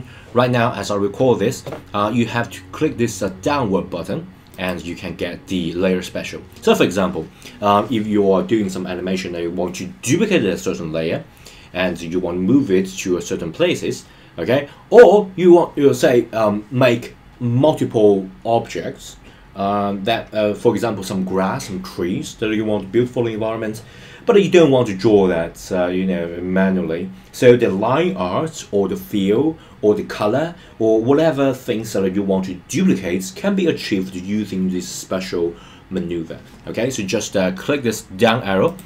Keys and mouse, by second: 4.5 click.